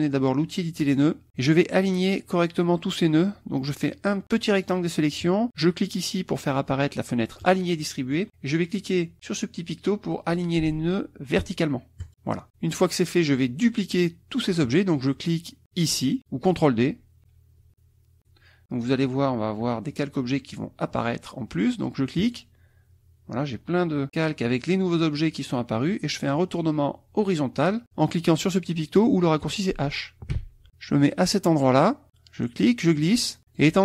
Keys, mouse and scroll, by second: 0.8 click, 1.8-4.9 drag, 7.5 click, 12.0 click, 12.7 click, 18.2 click, 22.2 click, 30.3 h, 32.6-33.8 drag.